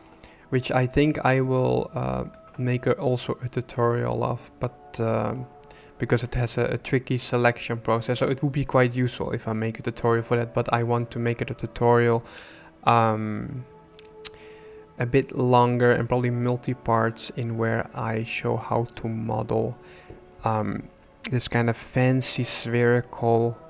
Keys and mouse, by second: 1.6 shift+middle click.